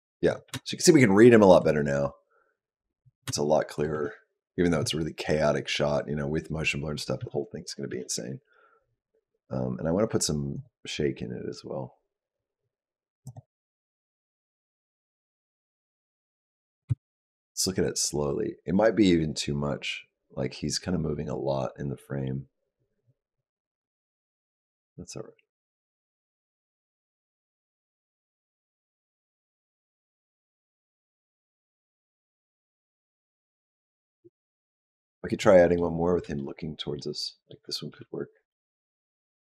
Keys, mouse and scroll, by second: 0.2 click, 0.4 space, 3.1 space, 3.7 click, 3.8 space, 7.1 space, 7.5 click, 7.8 space, 10.5 click, 13.2 click, 15.7 click, 16.7 space, 17.5 click, 34.9 click, 35.3 middle click, 36.2 shift+middle click, 37.1 middle click, 37.8 g.